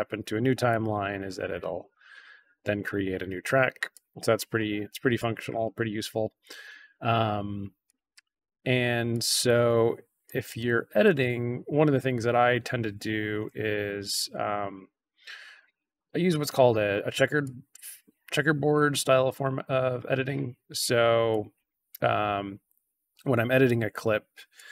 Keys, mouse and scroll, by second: 0.6-1.6 drag, 2.2 scroll up 1, 3.8-4.3 drag, 4.6-4.9 scroll down 1, 5.1-5.5 drag, 5.8 scroll down 2, 7.8 click, 9.0 drag, 10.2 drag, 11.0-11.3 drag, 13.7 ctrl+c, 14.3 click, 14.5 ctrl+v, 15.0-15.5 drag, 16.2 click, 17.4-18.6 drag, 19.1 click, 21.2-23.6 drag, 24.5-24.7 drag.